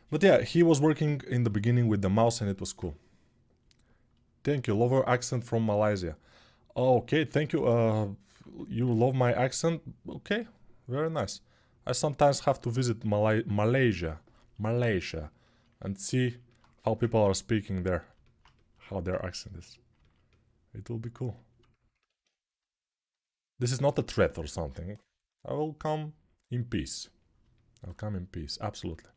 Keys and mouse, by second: 16.5 g, 28.9-29.1 alt+right drag.